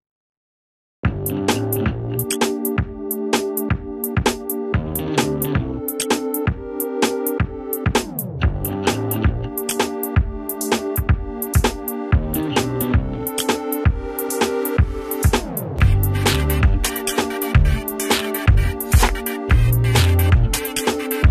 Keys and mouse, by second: 7.1 right click, 7.7-10.4 drag, 10.4 Delete, 11.3-15.7 drag.